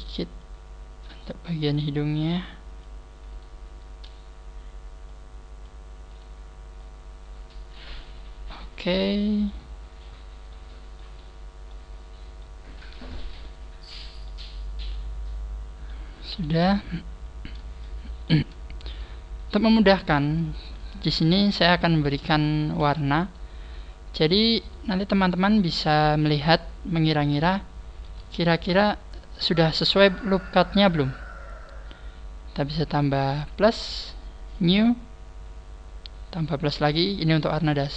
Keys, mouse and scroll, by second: 1.6 right click, 2.1 click, 3.3 right click, 5.1 click, 6.1 right click, 6.8 click, 8.0 middle click, 9.7-10.3 scroll down 6, 10.5 middle click, 11.2 scroll down 1, 11.6 middle click, 12.8 middle click, 14.9 middle click, 16.1-16.5 scroll down 2, 16.3 KP_1, 16.8 scroll up 4, 17.8 shift+middle click, 20.4 alt+shift+right click, 21.5-22.0 scroll up 2, 22.3 alt+shift+right click, 23.2 alt+shift+right click, 23.6 alt+shift+right click, 24.6 shift+right click, 25.4 shift+right click, 26.2 shift+right click, 28.4 alt+shift+right click, 32.7-33.3 scroll down 2, 33.5 click, 34.6 click, 34.7 click.